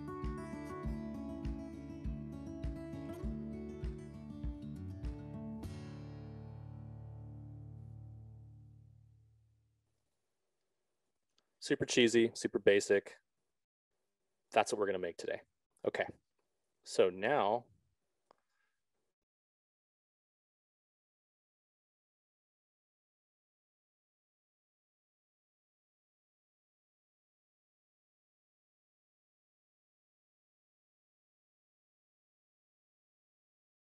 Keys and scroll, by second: 13.0 alt+Tab.